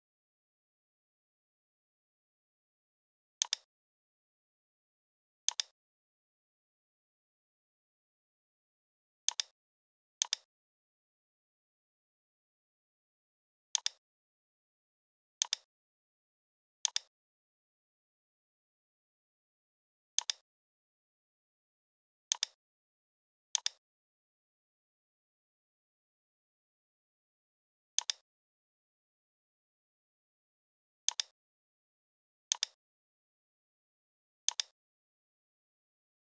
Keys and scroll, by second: 7.5 ctrl+d.